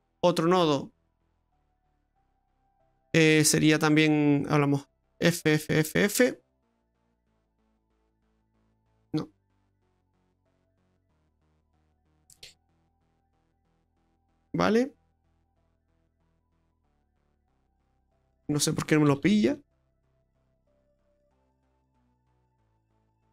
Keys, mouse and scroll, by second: 1.4 click, 4.8 click, 6.9 f, 7.1 f, 7.3 f, 10.3 f, 10.8 f, 17.2 click, 19.2 f, 19.4 f, 19.7 f, 22.3 f, 22.6 f.